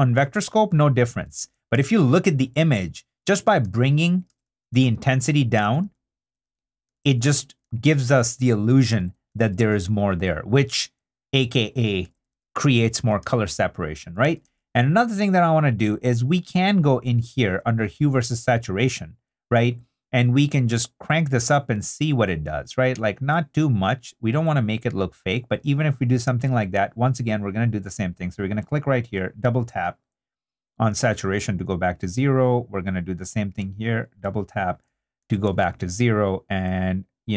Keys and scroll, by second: 0.6 super+d, 4.3 i, 4.7 super+d, 8.9 super+2, 9.3 super+2, 9.9 super+i, 10.7 i, 12.2 super+d, 13.2 super+2, 14.2 super+2, 35.2 super+d.